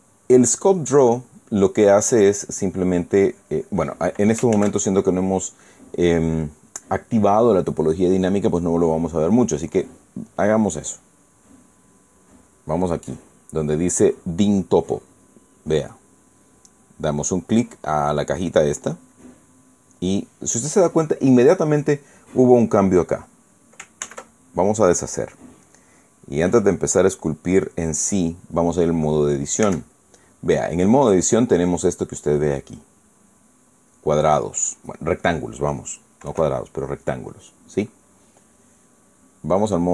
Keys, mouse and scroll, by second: 1.1 click, 3.8 click, 5.2 ctrl+z, 13.9 click, 16.6 click, 19.7 click, 27.1 click, 30.4 Tab, 31.7-35.5 drag, 37.0 KP_1, 39.6 click.